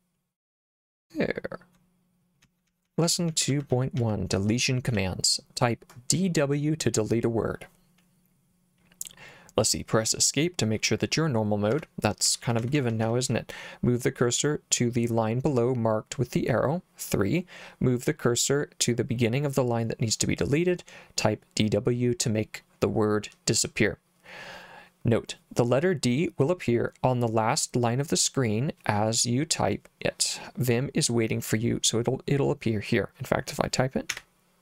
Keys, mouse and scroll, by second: 0.9 j, 2.4-5.0 typing, 11.7 Escape, 12.3-13.3 typing, 34.1 d.